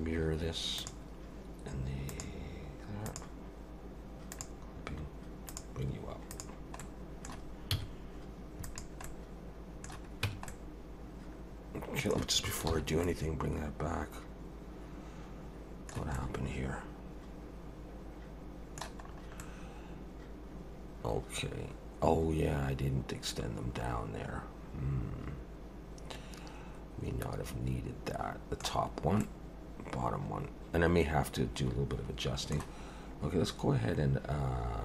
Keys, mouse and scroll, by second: 2.1 click, 3.1 click, 4.3 click, 5.5 click, 6.3 click, 6.8 middle click, 7.7 z, 9.0 middle click, 10.2 Tab, 10.5 middle click, 12.7 alt+h, 13.0 middle click, 16.1 middle click, 19.1 scroll up 3, 19.4 middle click, 29.2 middle click.